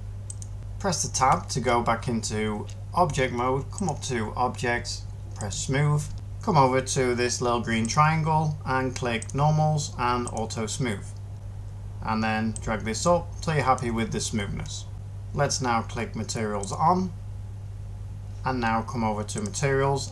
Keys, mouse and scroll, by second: 1.1 Tab.